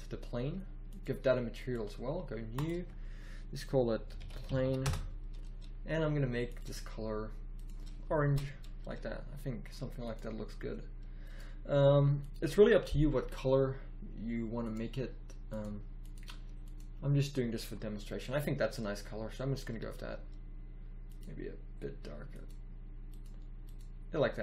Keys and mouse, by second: 8.3 shift+z, 21.1-23.4 drag.